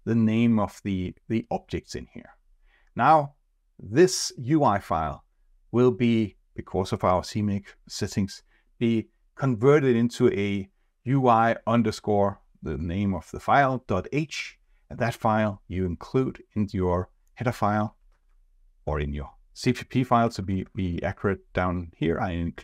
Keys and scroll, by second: 21.0 ctrl+shift+Tab.